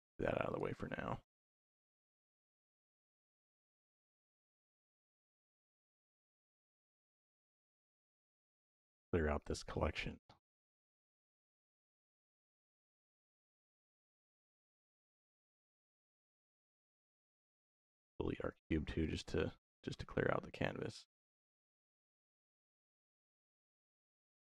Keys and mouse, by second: 0.3 click, 0.9 shift+d, 1.4 y, 2.1 click, 2.5-4.4 drag, 4.9-6.0 drag, 8.3 click, 11.0-12.6 right drag, 13.4 click, 14.8 click, 15.8 Delete, 17.9 c, 18.5 x, 19.9 middle click, 20.4 shift+middle click, 23.4-24.4 drag.